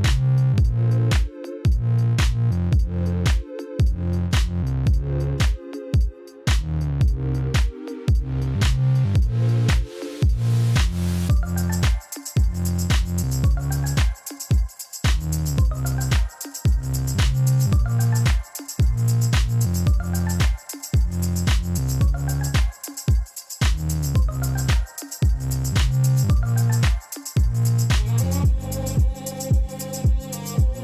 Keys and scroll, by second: 1.9 shift+z, 4.6 shift+z, 6.0 alt+a, 8.0 shift+z, 8.8 shift+z, 9.2 g, 9.4 x, 11.1 alt+a, 11.8 ctrl+z, 12.7 r, 18.3 alt+a, 21.9 Tab, 23.1 Tab, 27.8 g, 28.7 Escape.